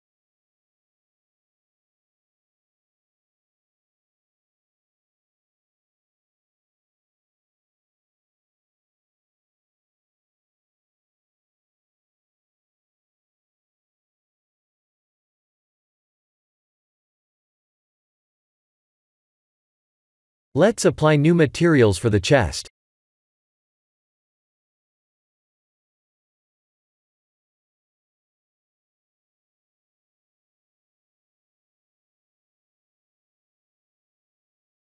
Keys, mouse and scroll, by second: 1.5 click, 6.0 click, 6.7 shift+click, 7.7 click, 8.1 x, 9.1 middle click, 11.5 click, 12.6 Tab, 14.4 3, 14.8 click, 15.9 middle click, 17.2 shift+click, 18.1 Tab, 20.8 click, 21.7 click, 23.5 click, 24.0 ctrl+shift+t, 26.9 click, 27.6 shift+click, 28.1 shift+click, 28.9 click, 29.4 shift+click, 32.0 click.